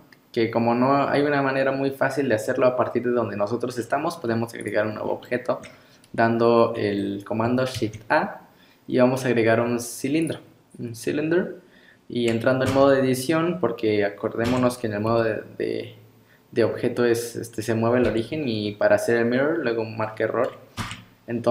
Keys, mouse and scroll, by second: 1.0 scroll up 4, 3.7-4.4 scroll down 10, 4.6 click, 4.9 scroll up 3, 5.2 shift+middle click, 6.4 scroll up 1, 7.8 shift+a, 12.7 Tab, 13.3 scroll down 2, 14.5 Tab, 15.1 g, 18.6 scroll up 4, 20.0-20.8 scroll down 3, 20.8 Tab.